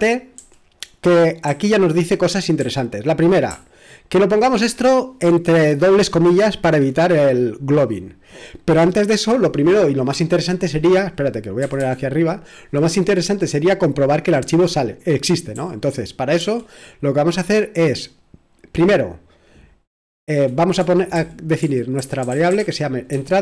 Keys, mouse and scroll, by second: 0.4 typing, 1.4 typing, 2.6-4.2 typing, 11.6 typing, 15.5-16.9 typing, 21.1-23.4 typing.